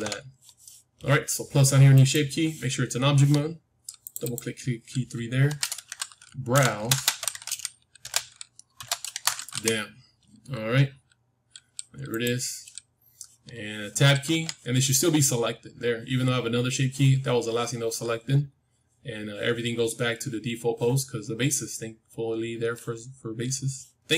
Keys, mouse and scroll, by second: 1.8-3.9 drag, 4.0-6.6 drag, 6.6 BackSpace, 6.7 BackSpace, 14.2 Tab.